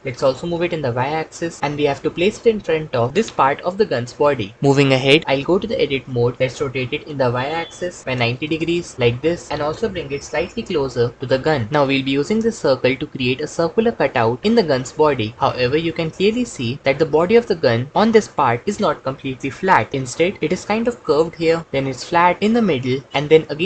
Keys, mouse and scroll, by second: 0.2 y, 5.9 Tab, 6.4 r, 6.8 y, 8.0 KP_9, 8.1 KP_0, 8.5 KP_Enter, 9.5 Tab, 9.9 g, 10.3 x.